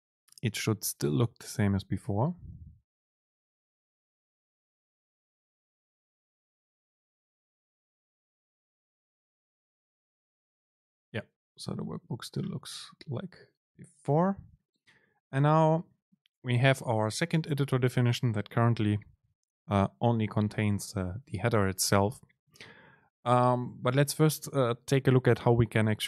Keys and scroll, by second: 23.5 shift+Left, 24.0 shift+Left.